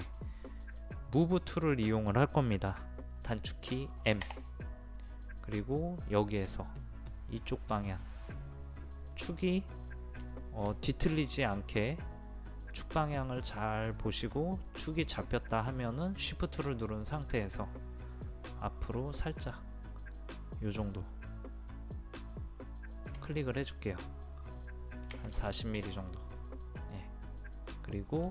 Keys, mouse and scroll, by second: 0.8-4.2 middle drag, 4.3 m, 6.2 click, 22.9 shift+click, 25.1 KP_4, 25.4 KP_0, 26.6 scroll down 1, 26.8-28.3 middle drag.